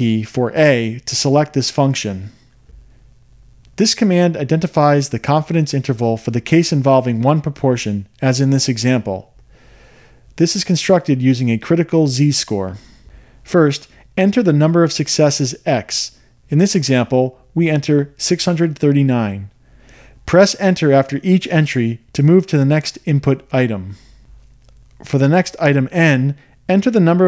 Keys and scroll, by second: 18.6 6, 19.4 3, 20.2 9, 24.0 Return.